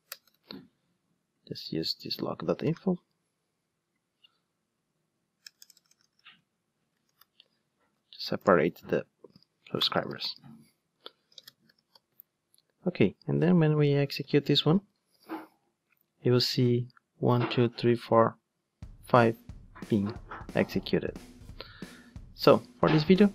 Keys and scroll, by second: 9.6 super+c, 9.8 super+v, 15.2 ctrl+shift+d.